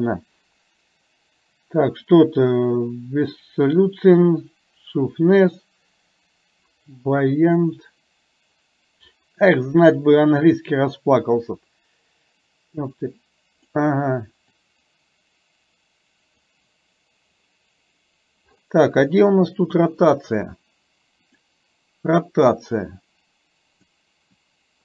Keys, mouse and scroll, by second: 12.9 click, 14.5-16.5 drag, 21.3 click, 22.6-23.9 drag, 24.3-24.8 drag.